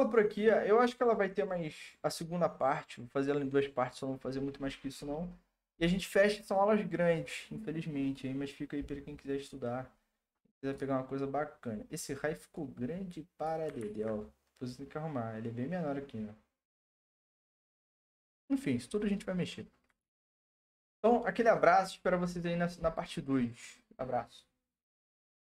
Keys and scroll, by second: 13.8 ctrl+z, 20.0 ctrl+s.